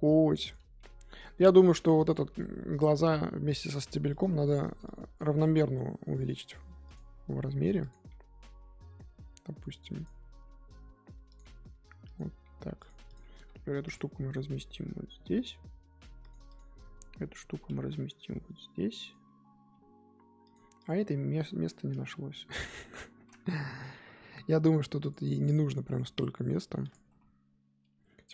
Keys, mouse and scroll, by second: 0.8 g, 1.9 click, 2.3 g, 5.2 click, 5.5 g, 7.0 s, 8.1 g, 10.3 s, 11.4 g, 12.4 g, 13.1 click, 13.9 click, 14.2 l, 15.2 g, 16.5 click, 17.4 l, 17.7 g, 19.7 g, 20.8 click, 21.1 l, 21.9 g, 24.3 s, 26.5 g, 27.1 s.